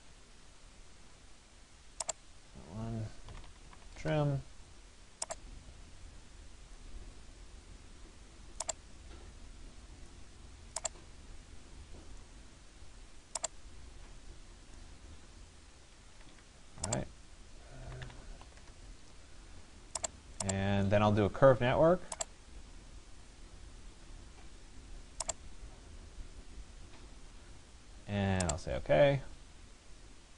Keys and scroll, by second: 3.5 Return, 15.8 Escape, 18.6 Return.